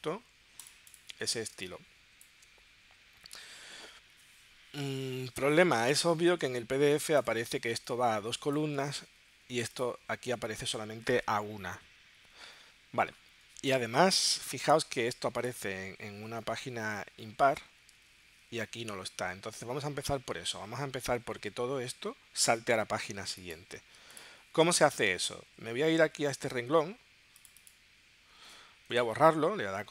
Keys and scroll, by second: 6.4 super+Tab, 9.0 super+Tab, 14.4 super+Tab, 18.2 super+Tab.